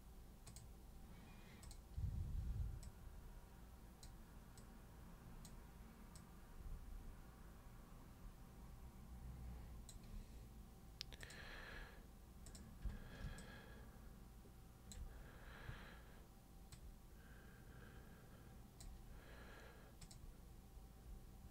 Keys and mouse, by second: 0.4 super+click, 1.6 super+click, 2.8-4.0 super+drag, 4.5 super+click, 6.1-9.8 super+drag, 11.2 click, 12.4 click, 13.4-14.9 alt+drag, 16.7-18.8 super+drag, 20.0 super+click.